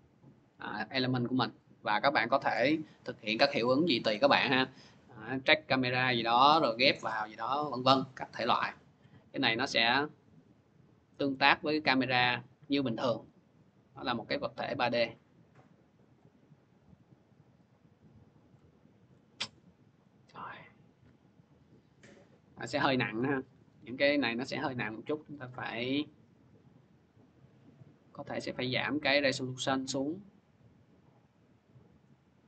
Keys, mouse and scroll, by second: 2.3 click, 5.8 click, 7.3 click, 7.3 scroll, 8.8 c, 9.7 middle click, 11.3 click, 11.6 c, 12.1 c, 15.9 click, 18.4 click, 19.1 ctrl+z, 23.0 ctrl+z, 25.1 click, 25.8 click.